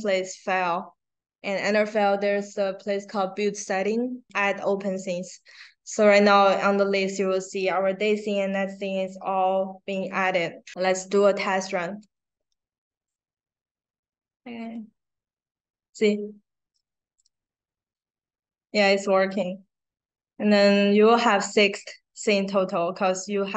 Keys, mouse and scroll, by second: 3.6 click, 12.9 click, 14.6 click, 16.7 click, 19.0 click, 23.2 click.